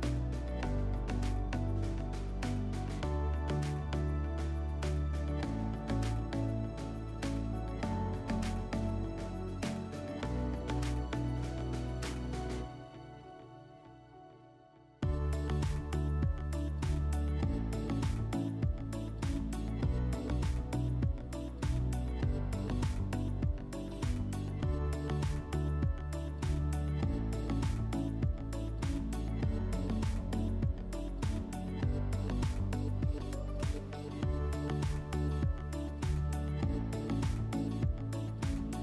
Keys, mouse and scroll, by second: 1.6-3.2 middle drag, 4.7-6.8 drag, 10.0-11.5 drag, 16.7 alt+right click, 18.6 click, 20.0 click, 20.6 click, 21.9 click, 22.6 middle click, 25.4 middle click, 33.9 click, 35.2 click, 37.7 click.